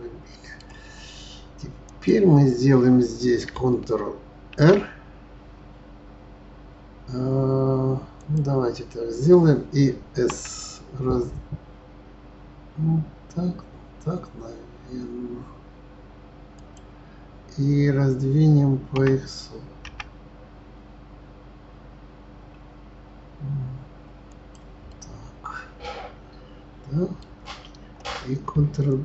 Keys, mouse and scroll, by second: 1.8 click, 4.5 ctrl+r, 18.9 s, 24.8-27.9 middle drag.